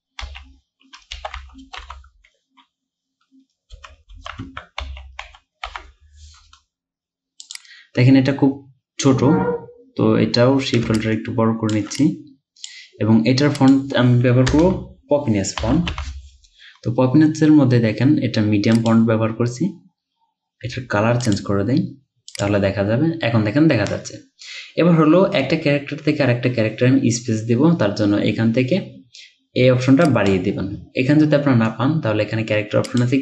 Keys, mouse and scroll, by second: 0.3-2.2 typing, 3.6-6.2 typing, 11.0 alt+shift+click, 14.5 BackSpace, 15.6 typing.